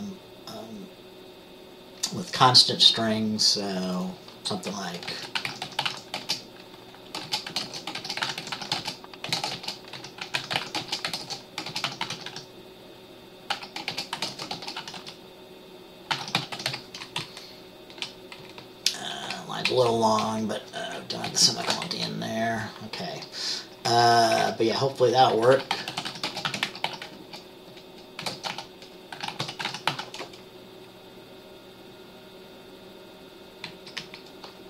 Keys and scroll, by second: 5.2-6.0 typing, 7.3-12.4 typing, 13.6-15.1 typing, 16.3-22.0 typing, 17.3 Left, 23.2-26.9 typing, 27.3 shift+Caps_Lock, 28.3-30.0 typing, 33.8 Left, 34.1 Up.